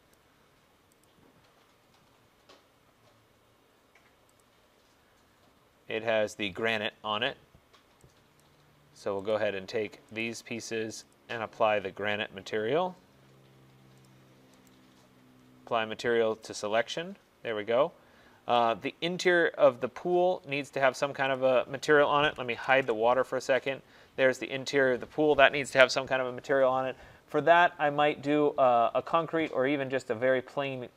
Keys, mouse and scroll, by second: 0.2 click, 1.3 click, 4.5 click, 8.4 click, 9.4 click, 10.3 shift+click, 11.2 click, 14.2 click, 14.8 right click, 16.7 click, 19.4 right click, 20.1 middle click, 21.4 click, 22.5-22.9 typing, 23.8 click, 26.5 Return, 29.7-30.7 scroll, 30.7-30.9 scroll.